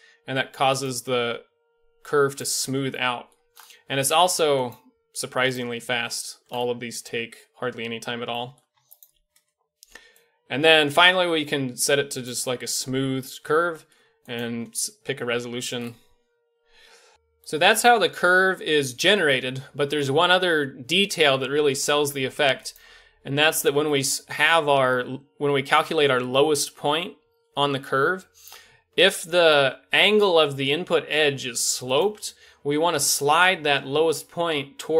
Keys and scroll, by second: 30.1 g.